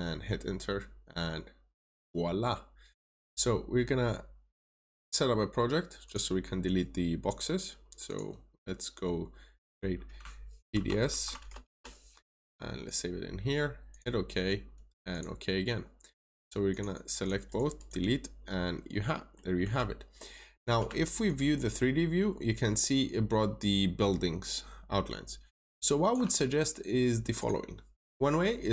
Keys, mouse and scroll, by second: 1.6 click, 10.1 click, 10.6-11.0 typing, 11.3 shift+Return, 12.7 click, 16.8 double click, 17.4 right click, 18.0-18.6 scroll up 1, 18.8 middle click, 21.2 ctrl+shift+click, 27.3 click.